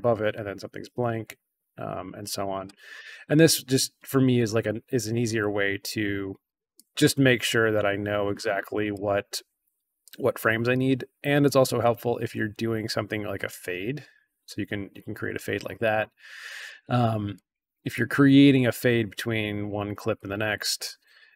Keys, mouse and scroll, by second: 1.9-2.5 drag, 3.2 scroll down 1, 3.3-3.7 scroll up 1, 4.0 scroll down 1, 6.7-8.9 drag, 10.0-10.6 drag, 11.8-13.1 drag, 13.8-14.9 drag, 15.8-16.6 drag, 17.3-17.8 drag, 19.2 click, 20.1-21.3 drag.